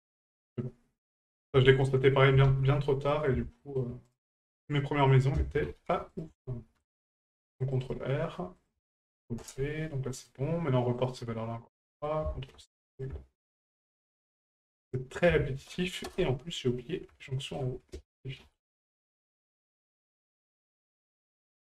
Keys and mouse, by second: 1.2 right click, 1.7 shift+right click, 3.1 middle click, 3.6 shift+middle click, 4.1 right click, 5.1-6.2 drag, 8.5 ctrl+click, 10.1 middle click, 11.0 right click, 12.0-13.1 drag, 15.1-16.1 ctrl+drag, 17.2 shift+middle click, 20.2 ctrl+click.